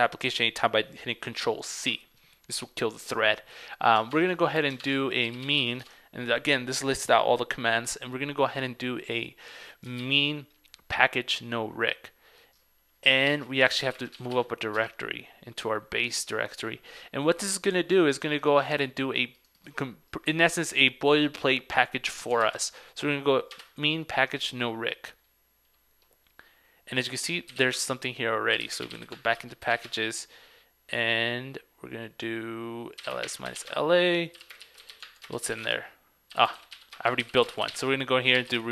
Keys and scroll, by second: 4.2 super+Tab, 4.9 super+Tab, 10.1 super+v, 13.3 super+v, 13.5 ctrl+c, 22.5 super+v.